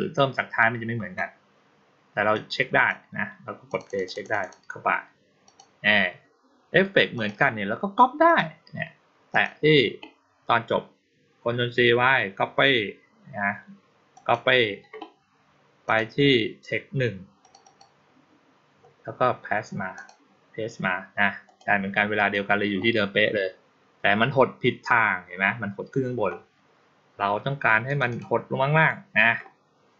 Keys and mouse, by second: 2.2-2.7 drag, 3.5 click, 3.7 click, 3.9 click, 4.1 click, 4.3 click, 5.3 click, 7.0 click, 8.1 click, 9.2 click, 14.0 click, 15.7 click, 17.3 click, 17.5 click, 19.8 click, 21.3 click, 22.0 click, 27.7 click, 27.9 click.